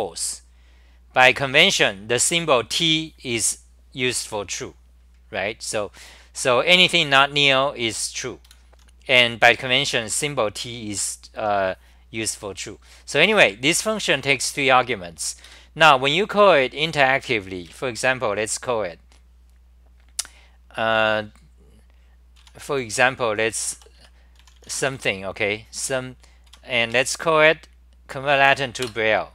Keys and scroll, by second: 8.5 super+w, 12.9-15.1 typing, 15.5 ctrl+g, 17.3 4, 17.7 ctrl+shift+Tab, 22.4 Home, 22.7 c, 23.5 Return, 23.9 Return, 23.9 c, 24.3 u, 26.5 Home, 28.9 Return, 28.9 a.